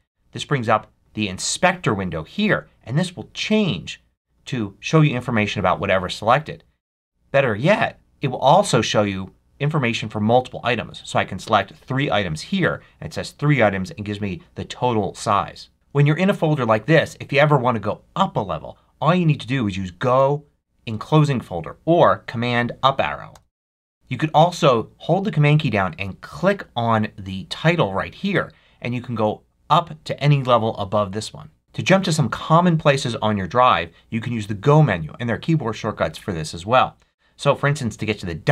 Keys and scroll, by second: 23.2 super+Up.